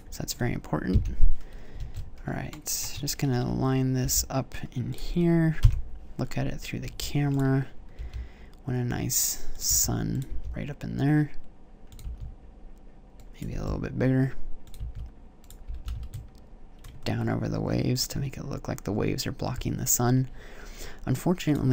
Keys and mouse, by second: 0.7 KP_1, 2.0 alt+z, 3.8 g, 5.4 KP_0, 6.7 s, 7.8 g, 9.4 click, 9.5 s, 10.0 click, 10.1 g, 11.8 click, 11.9 s, 13.5 g, 14.5 click, 14.6 s, 15.5 g.